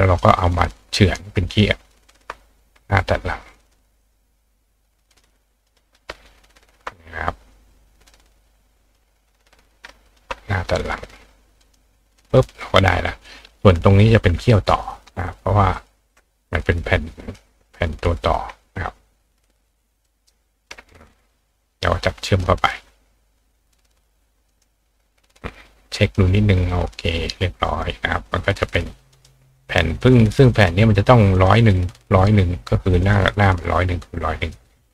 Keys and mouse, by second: 1.2 click, 2.1 shift+click, 4.0 click, 5.1 click, 5.7 click, 6.6 shift+click, 7.5-8.9 drag, 10.1 shift+click, 11.6 click, 12.2 click, 13.3 click, 14.7 click, 15.7 click, 16.6 click, 18.3-20.3 drag, 20.0-21.5 ctrl+right drag, 21.3 click, 22.4-24.5 drag, 24.6-26.0 drag, 26.1-27.7 drag, 27.8 click, 29.1 click, 30.0 click, 30.5 click, 31.3 click, 33.0 click, 34.4 click.